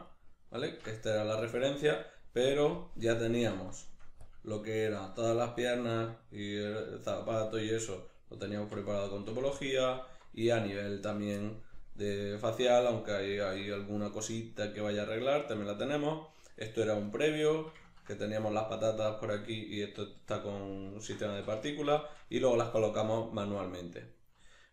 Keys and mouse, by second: 1.2 right click, 2.8-3.4 drag, 3.4 Tab, 4.3 click, 4.6-9.7 shift+middle drag, 8.6 Tab, 9.7 right click, 10.0 Tab, 11.4-17.0 middle drag, 12.5 Tab, 17.0 right click, 17.5-24.7 middle drag, 21.4 a.